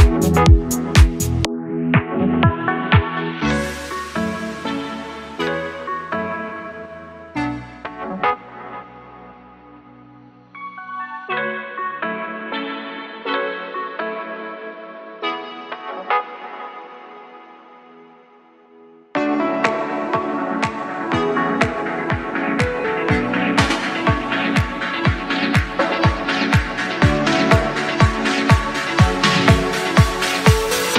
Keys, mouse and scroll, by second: 0.8 click, 2.4 KP_1, 3.1-3.9 scroll up 4, 4.0-5.4 shift+middle drag, 6.1 Tab, 6.8 scroll up 2, 8.7 3, 9.2 click, 9.7 shift+click, 10.1 shift+click, 10.5 shift+drag, 12.1 i, 13.7 click, 14.7-16.9 drag, 18.6 click, 19.7 click, 20.8 click, 22.2-23.9 middle drag, 24.0 e, 25.5 click, 26.2-27.7 drag, 28.4-29.3 scroll up 2, 29.8 s.